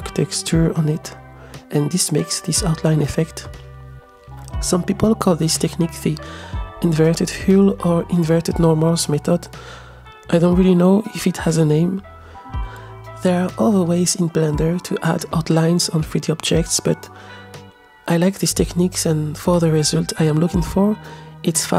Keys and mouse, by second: 0.3 click, 1.8 middle click, 2.5 click, 3.3-4.2 middle drag, 4.8 click, 5.4 click, 6.7 space, 7.7 space, 8.5-9.5 middle drag, 10.4 KP_0, 13.5-14.2 shift+middle drag, 14.8 space, 15.8 space, 15.9 click, 16.6 space, 17.1 click.